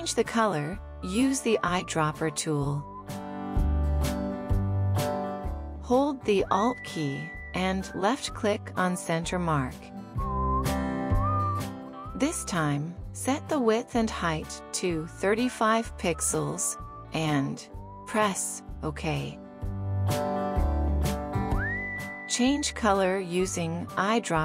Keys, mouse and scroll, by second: 11.4 alt+click, 15.3-17.5 typing, 16.0 Tab, 16.7 Tab, 21.7 typing.